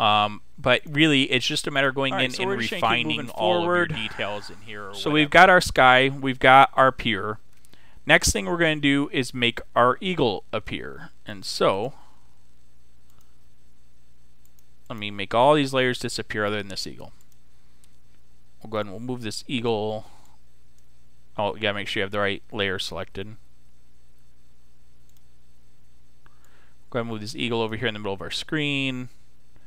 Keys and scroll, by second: 23.5 super+z.